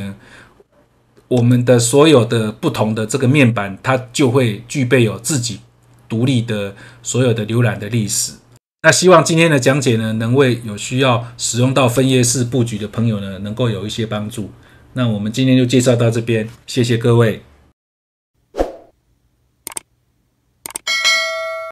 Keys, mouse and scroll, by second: 9.2-11.8 scroll, 11.8 click, 17.7 F3.